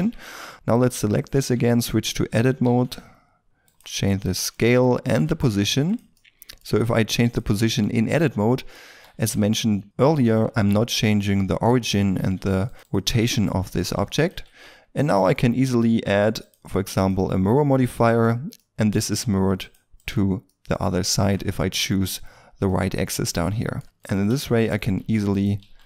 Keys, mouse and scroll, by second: 0.2 Tab, 0.7 right click, 1.3 Tab, 2.0 a, 2.3 a, 3.9-4.2 scroll up 1, 4.2 s, 4.8 middle click, 5.2 g, 6.1 middle click, 6.6 g, 7.5 middle click, 8.8 r, 9.3 g, 10.1 middle click, 12.1 s, 13.1 middle click, 13.9 g, 14.4 Tab, 15.6 middle click, 16.4 double click, 18.5 middle click, 19.9 double click, 20.4 middle click, 23.1 Tab, 23.4 middle click, 23.8-25.8 typing, 24.6 right click.